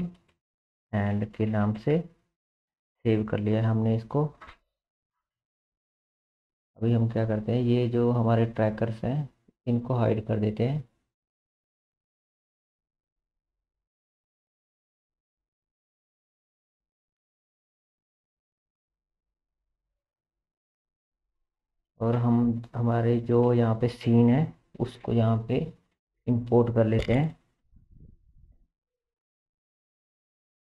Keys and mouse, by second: 6.2 ctrl+s, 7.7-12.4 middle drag, 12.4 click, 12.5-13.7 middle drag, 13.7 click, 13.9-16.4 middle drag, 16.4 click, 16.6-18.7 middle drag, 18.7 click, 18.8 middle click, 19.4 click, 22.5 ctrl+s, 30.3 middle click.